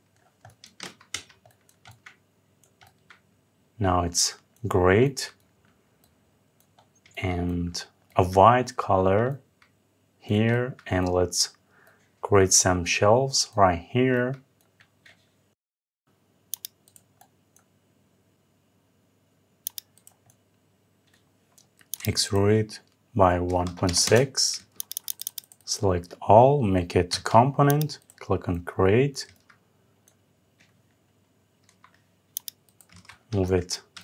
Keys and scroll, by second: 0.5 Escape, 23.7 Return.